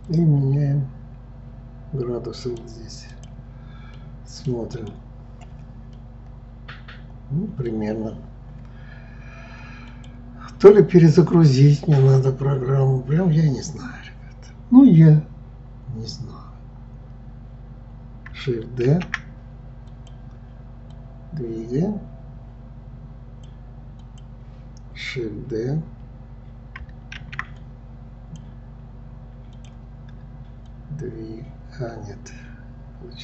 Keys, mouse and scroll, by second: 0.1-3.1 drag, 3.1-4.9 drag, 6.0-9.0 middle drag, 9.9 click, 18.9 shift+d, 21.0-23.9 drag, 24.0-27.0 drag, 30.7-33.2 drag.